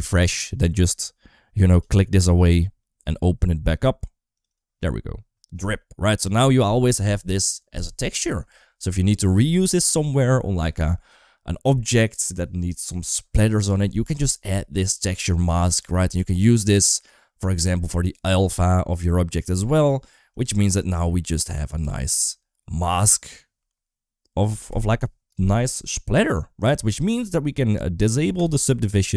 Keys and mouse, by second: 1.7 click, 2.3 click, 5.7 middle click, 15.6 middle click, 18.1 click, 18.4 click, 20.1 click, 20.7 middle click, 21.7 r, 25.2 shift+middle click, 26.5 click, 28.2 click.